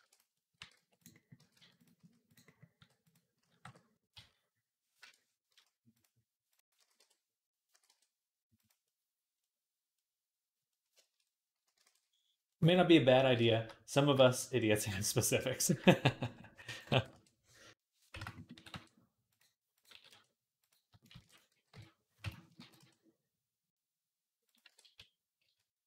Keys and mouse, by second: 0.0-3.2 typing, 2.3 middle click, 7.5 s, 8.8-11.3 middle drag, 11.7 ctrl+s, 12.3-15.6 middle drag, 15.6 shift+click, 15.8-19.6 middle drag, 16.5 click, 16.7 s, 18.4 s, 19.6 click, 19.7-20.7 middle drag, 19.7 s, 20.7 shift+click, 20.9 shift+d, 21.0-22.4 middle drag, 21.5 y, 22.0 Escape, 22.4 g, 24.5 r.